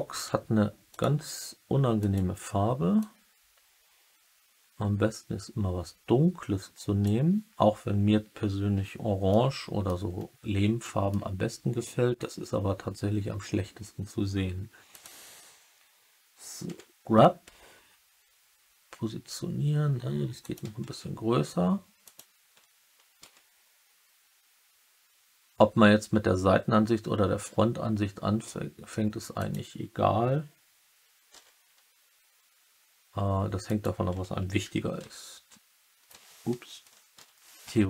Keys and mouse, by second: 0.8 click, 1.9 click, 9.2-9.8 middle drag, 10.8 middle drag, 14.8 click, 16.8-17.6 typing, 20.3 click, 20.8 s, 22.0 click, 23.2 g, 29.3 click, 31.2 s, 33.6 click, 34.9 h, 37.1 ctrl+z.